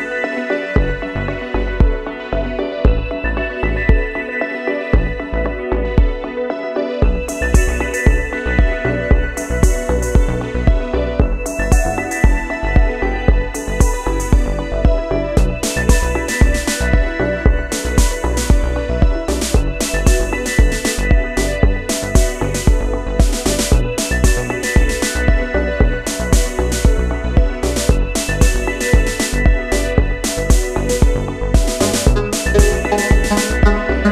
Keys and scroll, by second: 15.1 ctrl+g.